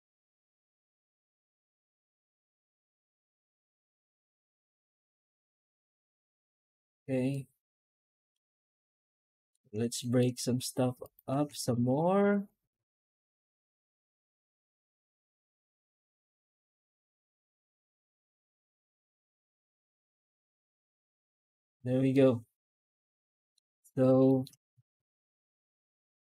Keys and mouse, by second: 7.2-8.2 middle drag, 9.0-9.4 middle drag, 9.9 shift+middle drag, 11.2 Tab, 11.6 alt+shift+z, 12.3 Tab, 12.8 alt+shift+z, 22.0-23.4 middle drag, 24.1 shift+middle drag.